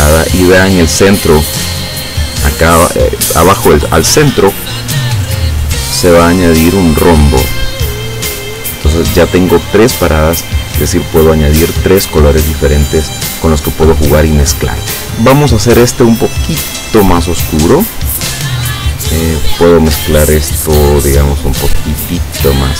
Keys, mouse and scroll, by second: 5.4 click, 12.2 click, 16.6-18.0 drag, 19.3 click, 21.0-22.3 drag.